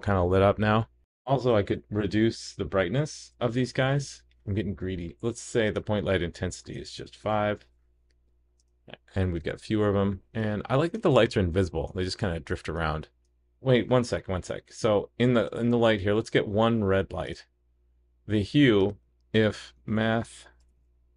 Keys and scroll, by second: 7.6 super+s.